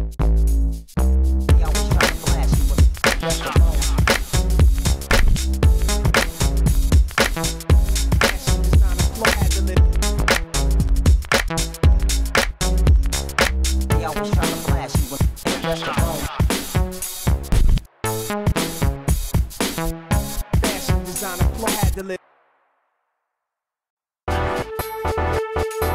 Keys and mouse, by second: 0.9 s, 1.0 f, 1.5-2.3 drag, 2.6 click, 3.2 f, 5.4 s, 6.0 s, 7.8 s, 8.6 f, 11.5 f, 14.9 s, 16.3 s, 17.5 s, 22.2 f.